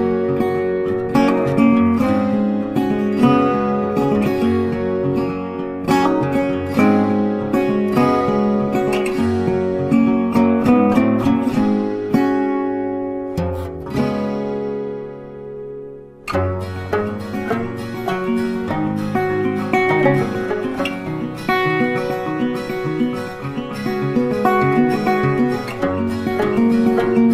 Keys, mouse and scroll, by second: 3.3 shift+click, 3.9 shift+click, 5.7 double click, 7.0 ctrl+g, 8.9 space, 9.1 ctrl+click, 9.9 double click, 10.5 ctrl+click, 11.1 space, 11.7 space, 13.6 space, 13.9 ctrl+click, 14.7 ctrl+click, 16.3 Up, 16.7 Up, 17.1 Right, 17.5 Down, 19.5 space, 19.6 double click, 20.6 a, 21.6 ctrl+shift+click, 23.5 ctrl+z, 26.0 ctrl+shift+click.